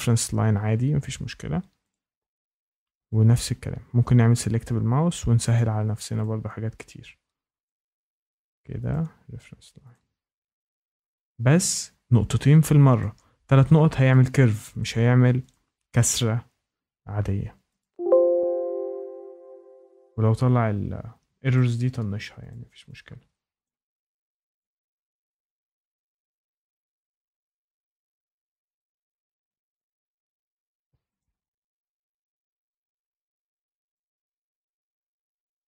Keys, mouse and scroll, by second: 1.9 click, 2.5 click, 4.3 click, 5.5 click, 6.2 click, 7.6 click, 8.9 click, 9.9 click, 10.8 click, 12.9 click, 14.1 click, 14.7 click, 15.5 ctrl+click, 17.7 click, 21.5 click, 22.5 click, 23.6 click, 24.5 click, 25.4 click, 28.3 click, 29.4 click, 31.1 click, 33.1 scroll down 1, 33.2 scroll up 3, 33.9 ctrl+click, 34.5 middle click, 34.6 middle click, 34.6-35.1 scroll down 2, 35.6 click.